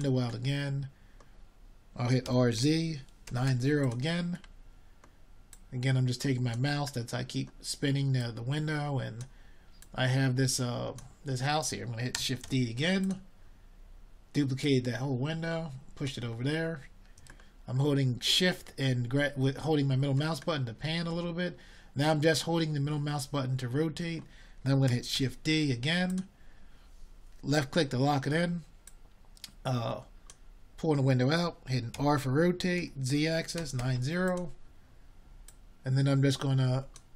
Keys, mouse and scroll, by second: 3.2 middle drag, 10.5 shift+d, 16.8 r, 19.2 click, 27.2 shift+d.